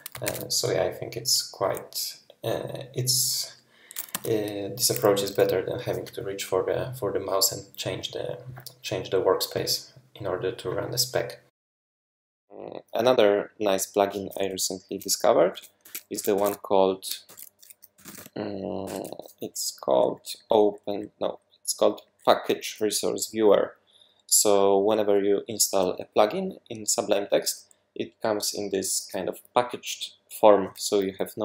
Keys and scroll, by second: 0.2 shift+super+e, 4.1 Escape, 11.4 shift+super+{, 15.5 super+w, 15.8 super+2, 16.2 super+w, 17.3 shift+super+p, 17.7-18.6 typing, 18.9 Return, 19.9 Down, 20.6 Down, 20.9 Down, 22.2 Up.